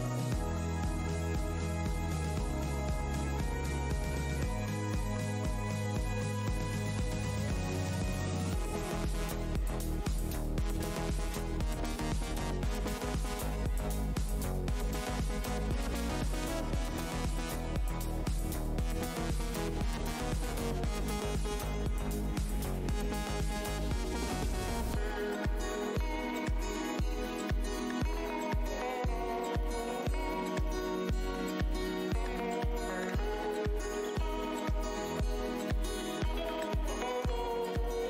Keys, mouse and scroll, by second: 0.2 scroll, 0.3 scroll up 1, 1.1 Tab, 1.4 click, 1.5 Tab, 2.0 shift+Tab, 2.1 shift+click, 2.7 scroll, 2.8 alt+scroll down 1, 3.4 alt+click, 3.9 alt+l, 4.0 shift+Tab, 4.6 space, 4.6 shift+d, 5.2 click, 5.4 Tab, 7.2 shift+Tab, 7.8-8.6 typing, 9.0 Tab, 9.2 click, 10.2 Tab, 10.8-11.3 alt+scroll down 1, 12.0 alt+click, 12.4 shift+Tab, 12.8-13.4 alt+scroll down 1, 13.6 click, 14.4 alt+Tab, 14.4 alt+click, 14.6 alt+click, 14.7 alt+scroll down 1, 15.7 Tab, 16.1 scroll, 16.1 scroll up 1, 16.9 Tab, 17.3 click, 18.6 alt+click, 20.3 alt+Tab, 20.9 Tab, 21.2 f, 21.7-22.3 scroll down 1, 22.4 Tab, 22.6 click, 23.5 ctrl+shift+Tab, 24.0 ctrl+shift+h, 24.6 alt+Tab, 24.7-25.1 alt+scroll up 1, 27.7 click, 27.8 Tab, 27.9 scroll, 27.9-28.6 scroll down 2, 29.9 Tab, 30.5 alt+click, 31.0 click, 31.2 Tab, 31.8 alt+Tab, 31.9 alt+click, 32.3 alt+scroll down 1, 32.6 space, 33.2 click, 35.0 alt+click, 35.4 click, 36.8 Tab, 37.9 click.